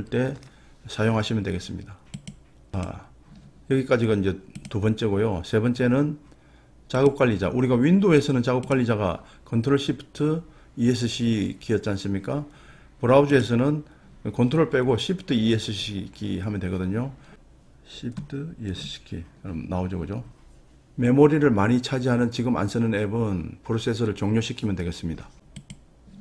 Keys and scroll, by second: 18.7 shift+Escape.